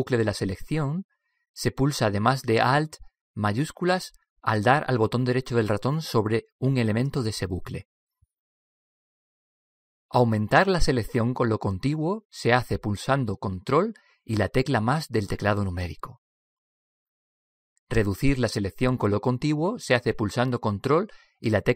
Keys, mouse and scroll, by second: 0.2 right click, 5.4-9.5 right drag, 15.2 ctrl+KP_Add, 16.1 ctrl+KP_Add, 17.1 ctrl+KP_Add, 21.5 ctrl+KP_Subtract.